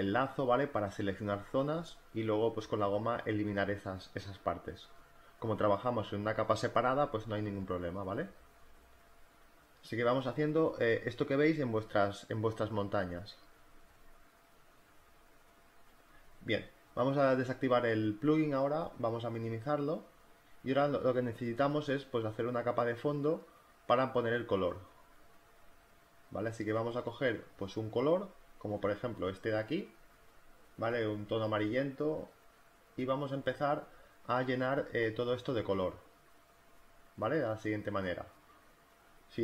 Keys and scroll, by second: 0.3 z, 0.6 space, 1.8-3.7 typing, 4.9 z, 5.2 b, 6.2 space, 7.4 ], 9.3 ctrl+z, 18.0 space, 24.0 b.